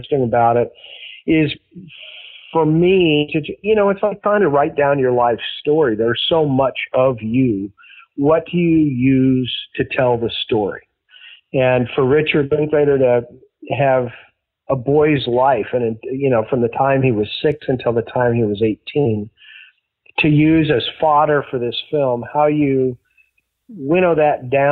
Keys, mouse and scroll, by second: 0.1 click, 0.7 click, 1.2-2.3 drag, 4.3 ctrl+s, 5.2-7.3 drag, 7.6 click, 8.6 click, 9.6 click, 10.6 click, 11.4 ctrl+s, 18.6-20.7 drag, 21.1 click, 21.9 click, 23.3-24.4 drag, 24.6 click.